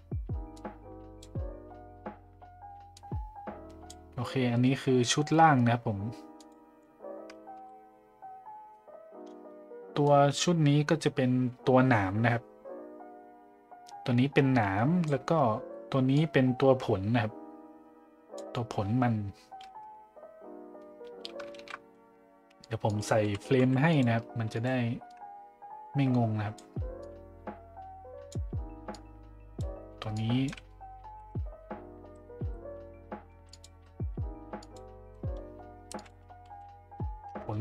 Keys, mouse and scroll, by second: 0.6-1.3 drag, 3.0 click, 6.3 click, 10.1-15.1 drag, 16.1-18.4 drag, 25.1-26.6 drag, 27.1-28.3 drag, 28.9-29.6 drag, 30.1-30.5 drag, 33.5 click, 34.6 click, 35.9-37.6 drag.